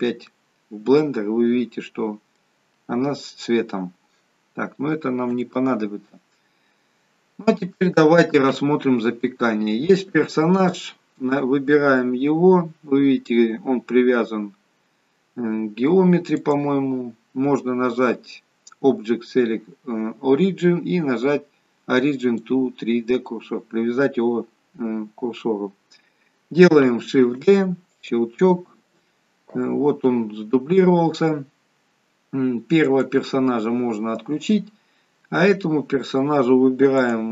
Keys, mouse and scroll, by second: 0.2 middle click, 5.3 Delete, 8.5 KP_1, 11.3 click, 13.1-14.3 scroll up 1, 14.3-14.9 scroll up 1, 14.9-15.3 scroll down 1, 17.4 click, 27.5 shift+d, 33.1 click, 37.0 click.